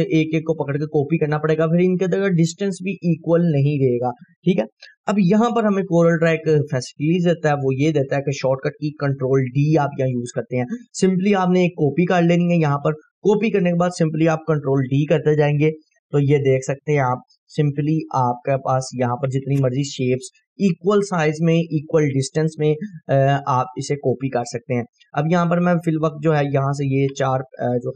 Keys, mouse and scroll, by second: 0.2-5.1 ctrl+right drag, 6.5 click, 7.8 Delete, 8.3-9.8 scroll down 2, 9.8-10.8 scroll down 1, 10.8-11.6 scroll up 2, 11.9-13.8 ctrl+drag, 13.5 ctrl+right click, 14.9 ctrl+d, 16.7-17.6 scroll down 2, 20.2-21.5 scroll down 2, 21.5-22.2 scroll down 1, 23.9-27.3 drag, 27.1 Delete.